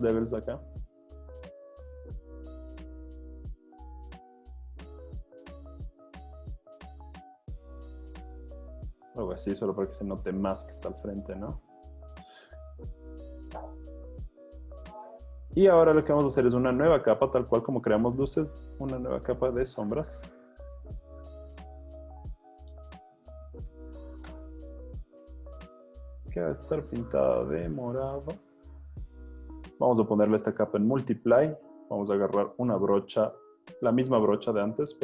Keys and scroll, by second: 9.8 z, 14.9 z, 21.5 Escape, 22.9-24.4 typing, 32.7 b.